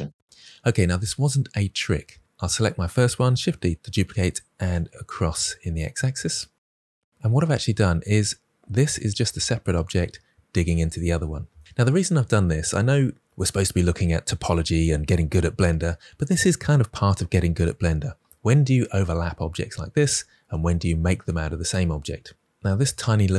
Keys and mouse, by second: 1.8 Tab, 2.3 click, 3.3 shift+d, 3.5 x, 4.5-5.4 drag.